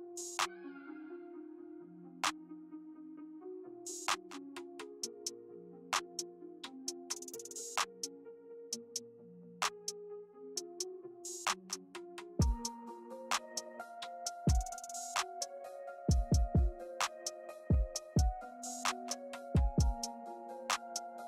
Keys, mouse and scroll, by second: 0.2 click, 0.5 click, 0.7 click, 1.0 click, 1.7 click, 2.2 middle click, 2.4 middle click, 2.6-2.9 scroll up 2, 2.8 middle click, 3.0 shift+middle click, 3.2 middle click, 3.4 shift+middle click, 3.8 click, 4.1 click, 5.0 middle click, 5.5 click, 6.6 click, 7.0 middle click, 7.5 click, 8.0 middle click, 8.7 click, 9.4-10.3 scroll up 4, 9.6 shift+middle click, 10.5 click, 11.1 click, 11.6 middle click, 12.1 click, 12.7 click, 13.5 click, 15.6 click, 16.2 click, 17.6 click, 18.5 click, 19.0 click, 20.1 middle click, 20.7 middle click.